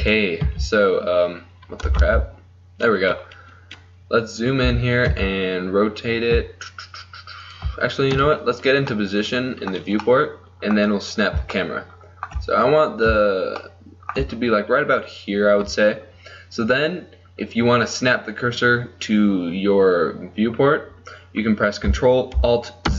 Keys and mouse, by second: 0.6 z, 2.4 ctrl+z, 4.1 middle click, 4.8 r, 5.8 middle click, 8.2 KP_1, 9.0 click.